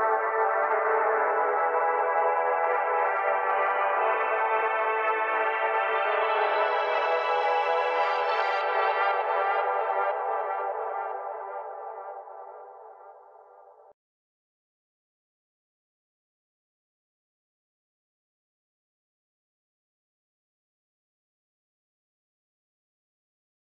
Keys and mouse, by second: 1.2 click, 1.3 right drag, 1.3 s, 1.6 KP_7, 1.8 r, 2.2 r, 2.6 click, 3.1-3.4 drag, 3.4 shift+d, 3.7 click, 3.9 middle click, 4.5 click, 4.6 Tab, 4.7 click, 4.7 right click, 5.2 right click, 5.3-7.9 typing, 5.8 right click, 6.0 click, 6.3 Tab, 6.7 click, 7.6 click, 8.4 click, 8.9 click, 8.9 g, 9.1-9.5 drag, 9.1 s, 9.6 drag, 9.7 right click, 9.8 middle drag, 9.8 s, 10.1-11.0 drag, 11.0-11.3 right drag, 11.1-13.5 typing, 11.4 click, 12.0-12.5 drag, 13.3 drag, 13.9 drag, 14.2-16.0 right drag, 16.0 s, 16.6 drag, 16.9 middle click, 17.1-17.8 right drag, 17.2 s, 18.0-18.7 drag, 18.5 right drag, 18.7 s, 19.0-19.7 drag, 19.7 s, 19.9 drag, 21.2 right click.